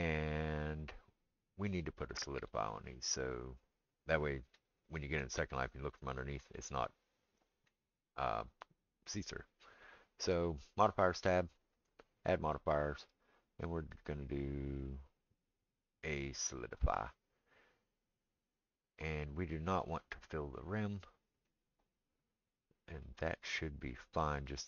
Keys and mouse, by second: 3.2 click, 3.3-11.7 middle drag, 11.7-20.7 drag, 20.7-24.6 middle drag.